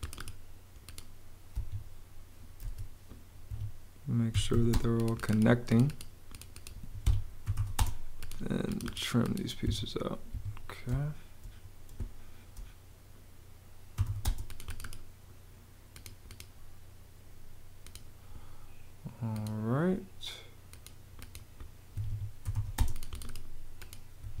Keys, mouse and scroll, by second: 1.4 Escape, 2.6 super+z, 3.4 super+Escape, 4.2 e, 4.6 space, 6.9 Escape, 7.1-8.0 typing, 9.6 Escape, 10.8 space, 13.6-14.5 typing, 21.8 Escape, 22.1-23.0 typing, 24.1 Escape.